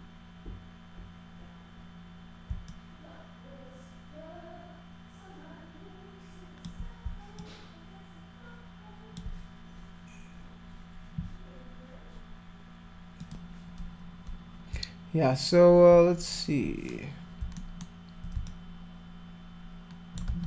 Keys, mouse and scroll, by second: 2.7-6.6 alt+drag, 7.4-9.2 alt+drag, 13.2 click, 17.6 alt+middle click, 18.5-20.2 alt+drag, 20.3 ctrl+z.